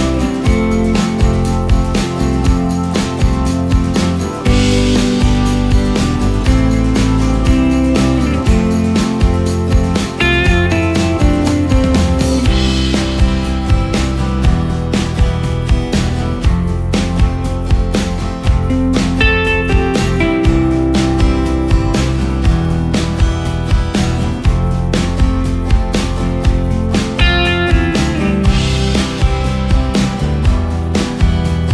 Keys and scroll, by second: 0.6 ctrl+space, 9.9 ctrl+space, 11.5 ctrl+space, 16.4 ctrl+space, 17.6 space, 21.8 ctrl+g, 26.8 ctrl+space.